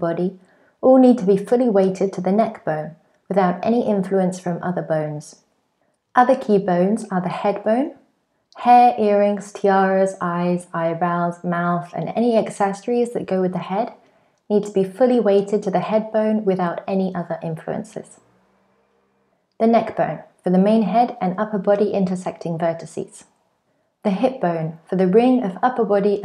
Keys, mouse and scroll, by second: 0.0 click, 0.4 click, 0.5 click, 0.8 click, 0.9 click, 1.5 click, 1.9-2.4 click, 2.2 click, 2.3 click, 2.5 click, 2.7 click, 2.8 click, 3.2 middle click, 3.7-4.2 click, 3.9 click, 4.1 click, 4.9 click, 19.6-20.3 click, 19.9 click, 20.5 click, 20.6 click, 20.8 click, 20.9 click, 21.1 middle click, 21.7-22.1 click, 21.9 click, 22.0 click, 22.8 click, 23.5 middle click, 23.5-26.1 click, 23.6 click, 26.1 scroll down 2.